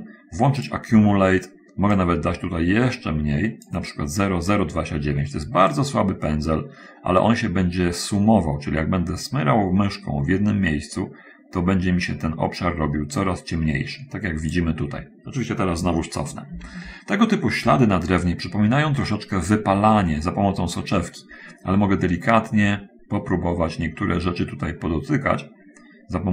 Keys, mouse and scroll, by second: 1.0 click, 2.3-4.1 drag, 6.1-15.0 drag, 16.6 ctrl+z, 22.0 click, 24.6-26.3 drag.